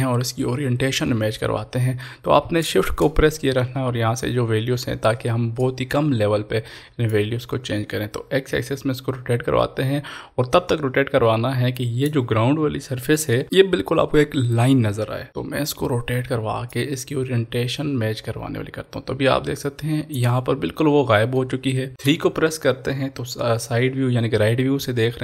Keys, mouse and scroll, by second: 6.8 click, 7.1-13.4 shift+drag, 16.6 shift+Num_Lock, 16.7-22.2 shift+drag.